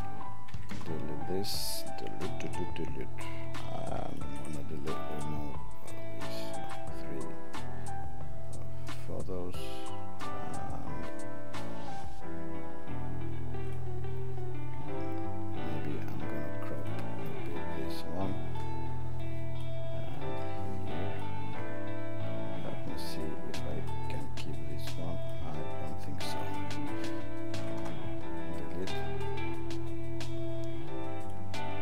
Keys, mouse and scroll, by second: 6.5 click, 20.1 click, 25.2 click, 26.3 click, 27.6 right click.